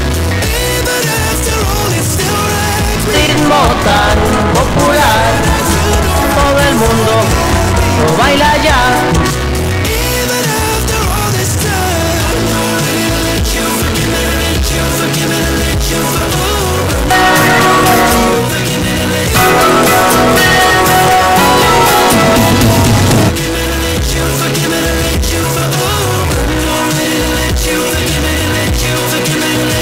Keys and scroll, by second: 9.4 Page_Down, 23.3 Page_Down.